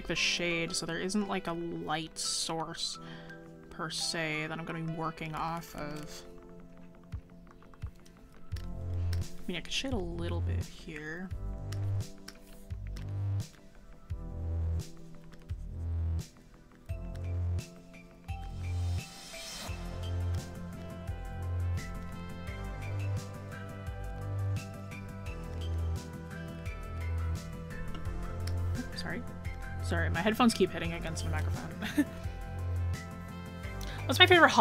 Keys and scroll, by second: 31.1 scroll down 1.